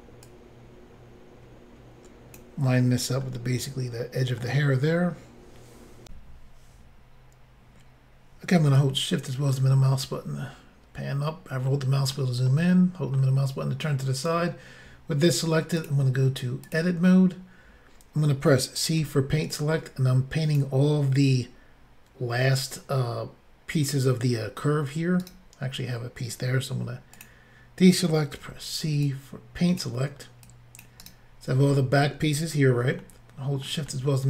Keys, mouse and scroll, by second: 0.2 click, 3.3 middle click, 6.1 Insert, 8.7 shift+middle click, 9.8-10.7 scroll up 2, 11.7 shift+middle click, 12.5 middle click, 15.8 click, 15.9 click, 16.6 click, 16.7 click, 19.0 c, 19.5 click, 25.2 right click, 25.3 right click, 27.1 click, 27.2 click, 28.4 c, 29.0 click, 30.4 click, 31.0 right click, 33.0 shift+middle click, 33.9 middle click.